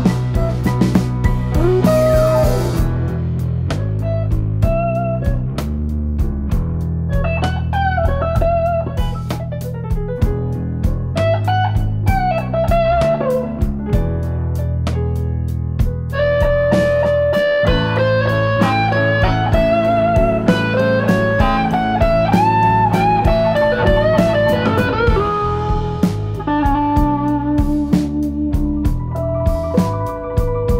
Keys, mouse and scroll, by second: 2.6 middle click, 3.6 3, 4.3 b, 7.0 KP_Decimal, 8.0 e, 9.6 click, 10.0 2, 11.4 alt+click, 11.7 alt+click, 12.1 middle click, 12.7-13.1 scroll down 3, 13.4-14.3 scroll up 5, 14.3 scroll up 1, 15.3 click, 16.1 click, 19.8 click, 20.1 Tab, 20.7 click, 21.8 r, 27.2 scroll down 2, 27.5 middle click, 28.6 shift+a, 30.5 click.